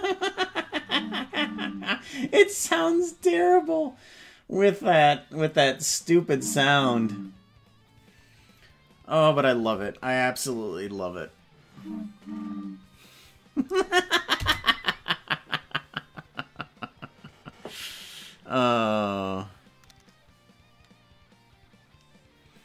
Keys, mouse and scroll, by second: 14.4 space.